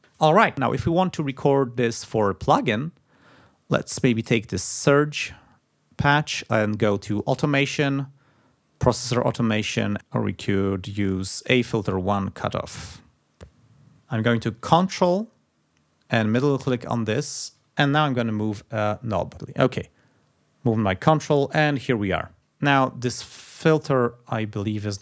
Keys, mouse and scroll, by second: 2.9-3.2 scroll up 2, 4.1 click, 5.1 scroll down 2, 5.9 scroll down 2, 7.0 click, 12.3 click, 16.2 ctrl+click, 23.1 click, 24.8 click.